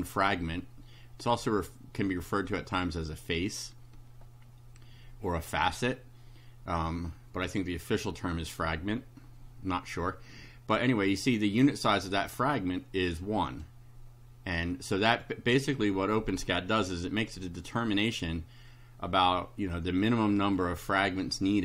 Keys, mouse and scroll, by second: 11.7 scroll up 2, 12.6-13.8 right drag, 14.7 right click.